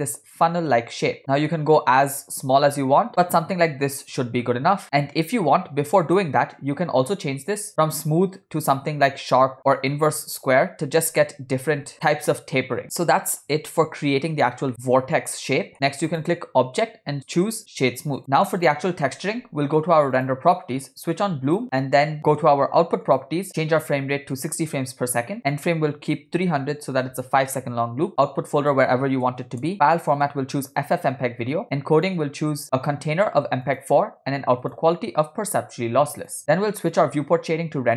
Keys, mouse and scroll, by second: 7.6-10.5 drag, 11.7 s, 12.9 middle click, 14.0 Tab, 14.9 middle click, 16.1-18.2 drag, 20.2 click, 23.2 click, 23.6-24.6 drag, 25.5-27.1 drag, 26.8 0, 28.1 scroll down 2, 28.8 click, 29.6 /, 30.3-31.2 drag, 31.7 scroll down 4, 32.1 click, 32.3 scroll down 1, 32.8-33.9 drag, 34.8-36.4 drag.